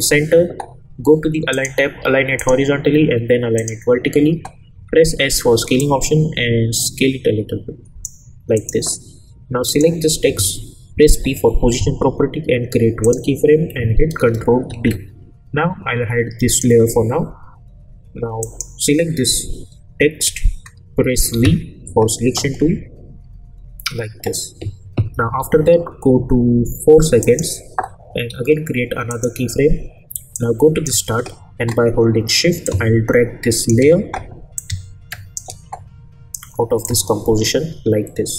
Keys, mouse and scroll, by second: 1.5 click, 4.7 s, 5.8-8.3 drag, 11.1 p, 13.0 click, 14.6 ctrl+d, 16.5 click, 16.5 click, 21.3 v, 25.1 =, 25.4 =, 27.2-31.0 drag, 36.8-38.3 drag.